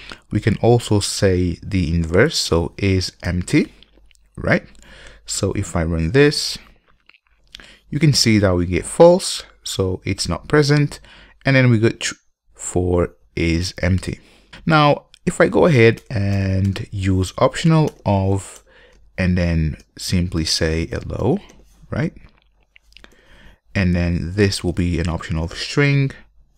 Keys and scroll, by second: 0.1 super+d, 3.4 Return, 6.2 Return, 16.0 alt+BackSpace, 18.8 Return.